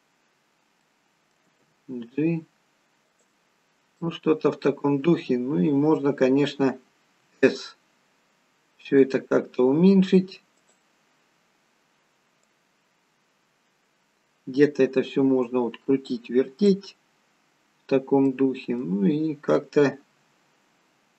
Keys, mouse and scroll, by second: 0.7 middle click, 1.4 g, 3.4 scroll down 3, 3.9 middle click, 5.4-6.5 scroll down 3, 6.5-6.9 scroll down 1, 7.1 s, 10.9-12.4 scroll down 2, 12.4 click, 12.4-13.8 scroll down 1, 17.2-18.1 scroll up 11, 18.2 middle click, 20.1 s.